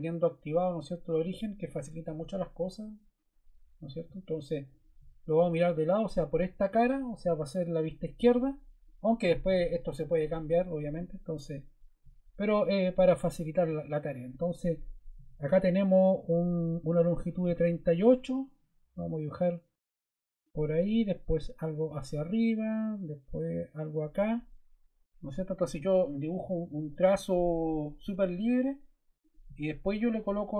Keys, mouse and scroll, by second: 25.2 ↺, 28.0 d.